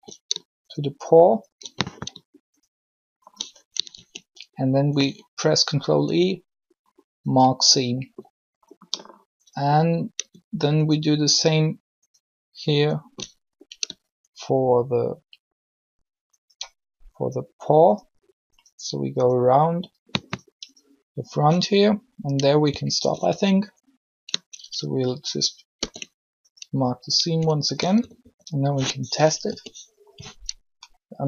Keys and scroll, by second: 3.8 ctrl+shift+e, 25.5 ctrl+e, 27.9 typing, 29.4 u.